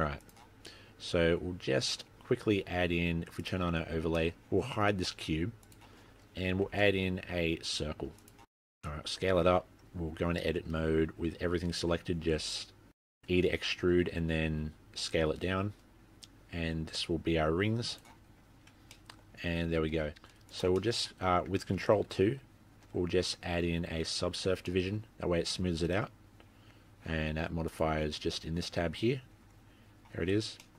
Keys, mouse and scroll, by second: 1.3-2.1 scroll down 8, 1.9 middle click, 2.1 click, 2.2-3.4 scroll up 3, 3.4 click, 3.4-4.1 scroll up 1, 4.2 middle click, 5.7 click, 6.1-6.5 scroll up 5, 6.7 shift+a, 8.6 scroll up 2, 8.7 s, 9.7-10.2 scroll down 5, 10.4 Tab, 10.5-11.5 scroll up 1, 11.5 scroll up 1, 11.5 e, 18.6 Tab, 18.9 middle click, 19.3 scroll down 4, 19.5-19.9 scroll up 6, 19.9 Tab, 20.5 scroll down 4, 20.5 z, 20.8 middle click, 22.9 ctrl+2, 24.7 middle click, 27.7 click, 30.4-30.7 scroll down 3, 30.6 middle click.